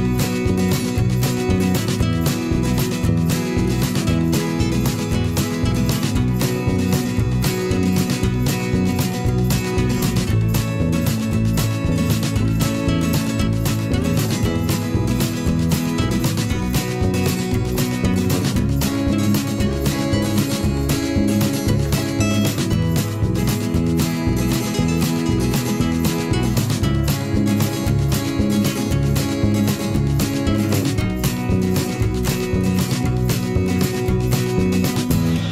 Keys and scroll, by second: 12.2 g, 13.5 v, 14.6 g, 17.6 v, 34.3 g.